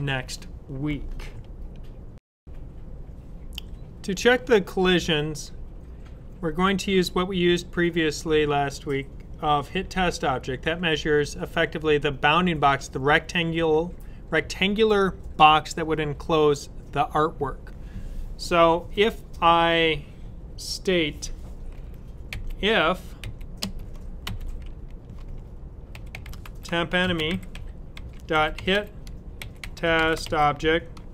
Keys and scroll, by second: 22.2-23.1 typing, 24.1 typing, 25.6-30.6 typing.